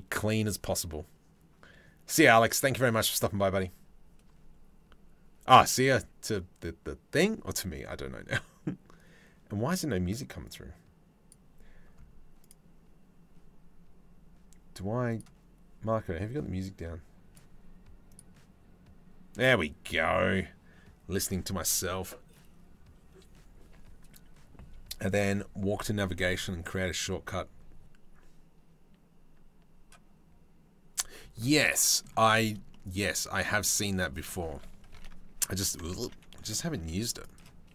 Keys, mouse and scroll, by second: 31.1 middle click, 31.9 shift+middle click, 32.3 middle click, 33.0 Tab, 33.2 click, 33.5 Tab, 33.8 Tab, 34.5 ctrl+t, 35.6 ctrl+z, 36.4 ctrl+r, 37.3 ctrl+r.